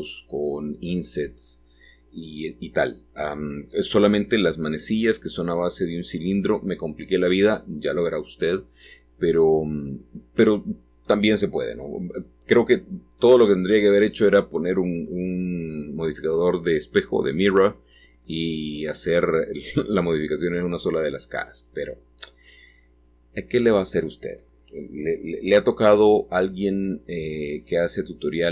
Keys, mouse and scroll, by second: 2.5-3.6 drag, 3.6-6.3 middle drag, 6.6-8.6 drag, 9.6-12.5 drag, 12.5 middle click, 13.5 Tab, 14.5-15.4 scroll down 1, 15.4-16.5 scroll down 1, 16.5-17.7 scroll down 1, 17.8-18.9 drag, 19.7 g, 22.9 Escape, 23.5-24.6 scroll down 1, 24.8 g, 27.8 click, 28.4 middle click.